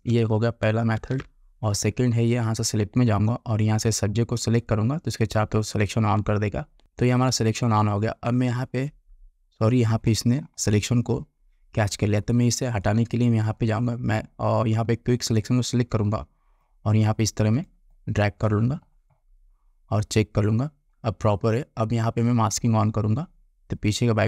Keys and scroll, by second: 1.1 ctrl+d.